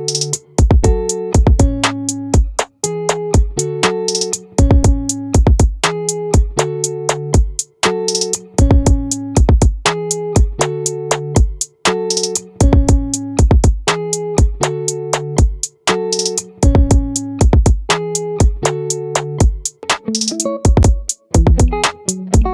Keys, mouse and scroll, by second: 1.1-2.1 drag, 2.1-3.7 middle drag, 3.7-5.1 drag, 8.9-10.2 drag, 15.1-22.5 right drag.